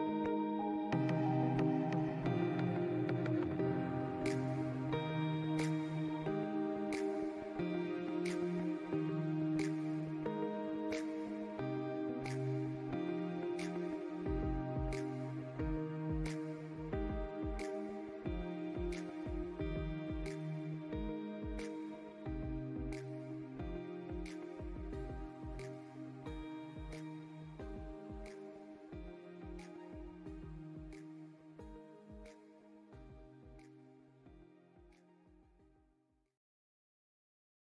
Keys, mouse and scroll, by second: 0.4 click, 1.5 alt+scroll up 1, 1.5 scroll down 1, 1.8 click, 4.2 alt+scroll down 1, 4.4 click, 4.9 alt+scroll up 1, 5.2 click, 6.7 ctrl+shift+[, 7.1 click, 7.3 alt+scroll up 1, 7.4 click, 8.0 click, 8.7 alt+scroll down 1, 9.3 click, 9.8 space, 10.1 alt+scroll up 1, 10.4 click, 12.3 click, 12.9 click, 13.3 click, 13.8 alt+scroll down 1, 14.4 click, 15.5 click, 16.2 click, 16.7 space, 17.0 click, 17.4 scroll down 1.